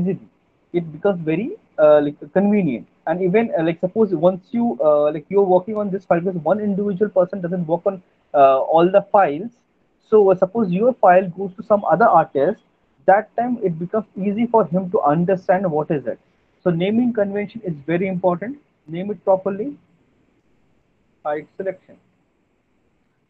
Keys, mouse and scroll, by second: 5.5 click, 19.0 click, 19.0 alt+middle click, 19.8 right click, 20.7 click, 22.1 alt+middle click, 22.5 middle click.